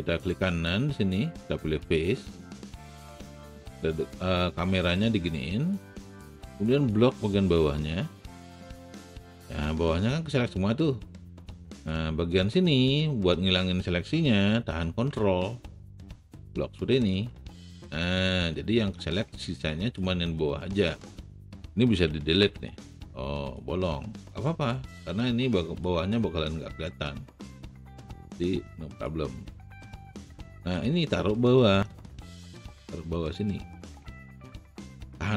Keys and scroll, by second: 22.3 Delete, 30.6 w, 31.3 alt+w.